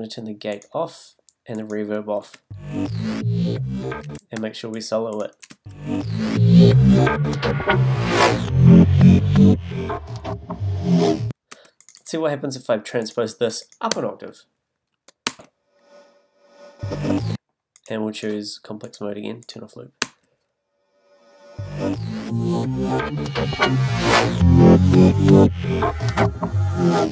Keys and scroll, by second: 2.3 space, 4.0 space, 6.5 space, 11.5 space, 17.2 space, 20.0 space.